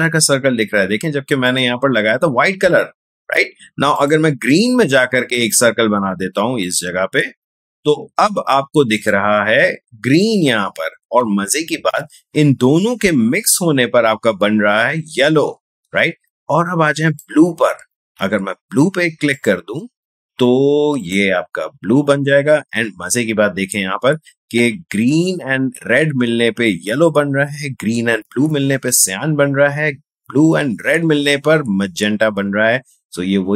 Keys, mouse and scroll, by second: 1.4 click, 3.9 click, 6.6 click, 8.9 click, 13.0 space, 17.0 click, 21.7 space.